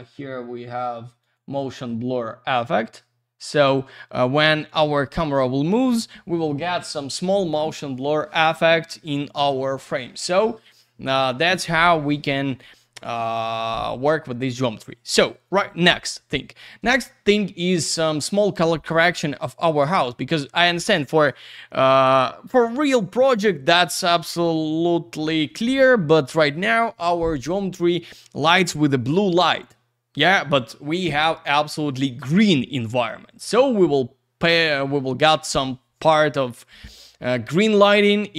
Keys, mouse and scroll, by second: 1.2 click, 1.3 click.